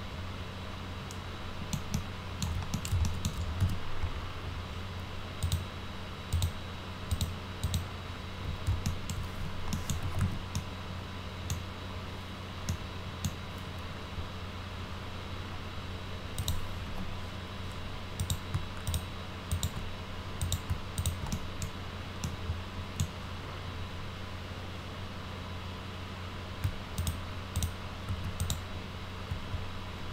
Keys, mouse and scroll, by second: 1.8 alt+middle click, 2.7 middle click, 3.0 alt+middle click, 3.5 z, 5.3 click, 6.3 click, 7.0 click, 7.6 click, 8.8 alt+middle click, 9.6 middle click, 9.7-10.6 typing, 10.5 middle click, 12.6 middle click, 16.3 click, 16.8 w, 18.1 click, 18.8 ctrl+click, 19.4 ctrl+click, 20.3 click, 20.9 ctrl+click, 21.2 middle click, 22.2-22.9 middle drag, 27.0 ctrl+click, 27.6 ctrl+click, 28.1 ctrl+z, 28.4 ctrl+click.